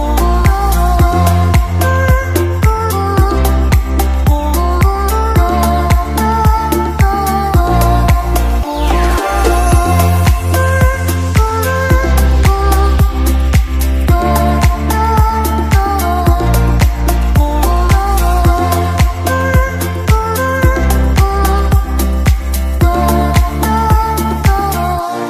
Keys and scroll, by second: 2.5 ctrl+z, 5.3 ctrl+z, 19.6 space, 20.1 space.